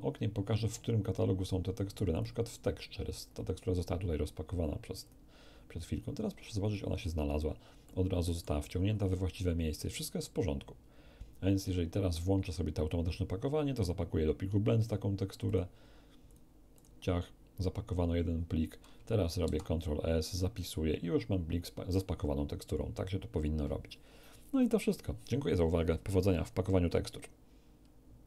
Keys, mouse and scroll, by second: 2.1 click, 5.0 click, 6.6-7.4 scroll down 2, 7.8 middle click, 15.4 click, 16.2 click, 16.7 click, 19.4 ctrl+s, 20.5 click, 28.2 q.